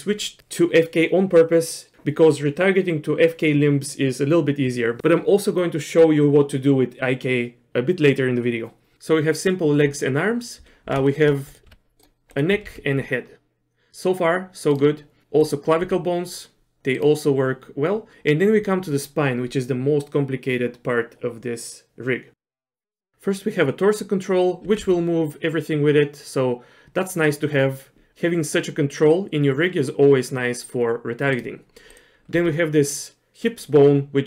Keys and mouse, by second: 11.1 shift+middle click, 11.7 r, 12.5 r, 15.8 r, 24.6 r, 31.9 click, 32.3 r.